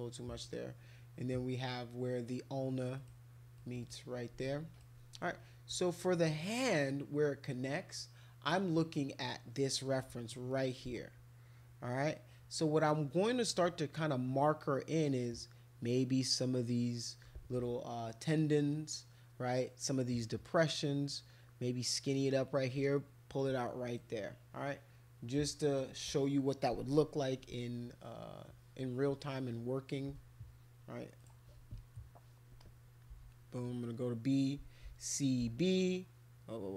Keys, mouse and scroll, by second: 3.0 click, 3.5 click, 3.8 click, 4.5 alt+click, 8.7-10.0 right drag, 10.5 middle click, 24.0-25.8 right drag, 31.2 click, 32.6 click, 33.1 b, 34.9 c, 35.4 b.